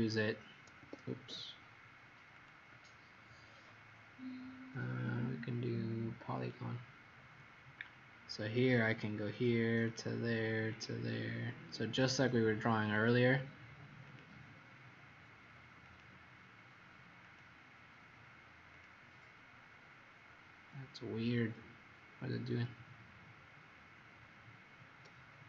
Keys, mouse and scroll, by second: 0.7 Escape, 2.2 click, 23.1-23.7 scroll up 5, 24.0-24.4 scroll up 3, 25.0 scroll up 1, 25.0-25.4 scroll down 7.